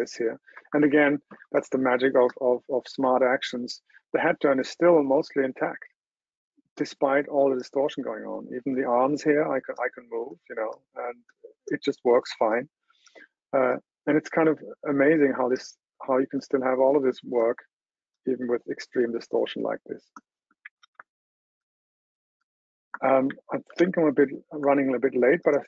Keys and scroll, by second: 21.2 super+w, 24.0 super+h.